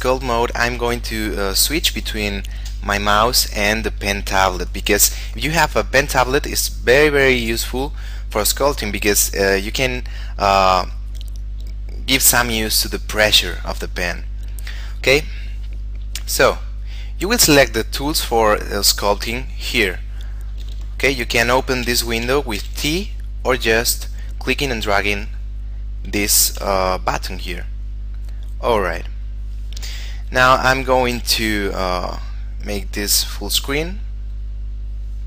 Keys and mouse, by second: 0.5 middle click, 16.9 click, 21.2 t, 24.0 click, 26.7 t, 27.7 click, 31.2 shift+space, 32.2 shift+middle click, 34.1 middle click.